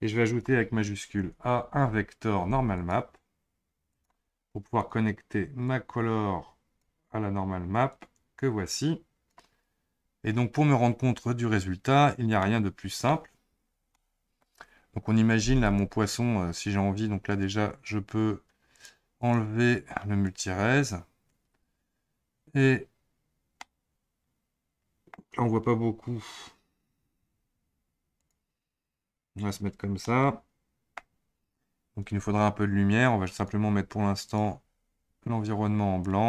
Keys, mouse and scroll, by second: 1.6 shift+a, 5.7 click, 7.9 click, 12.4-15.6 middle drag, 15.6 click, 18.7 click, 19.2 click, 20.2-23.3 drag, 23.5 scroll up 1, 23.6-25.2 middle drag, 25.2-26.5 scroll down 1, 28.9 click, 30.0-31.6 middle drag, 31.6-32.0 scroll down 4, 32.0-33.3 scroll up 2, 33.3 click, 34.3 click.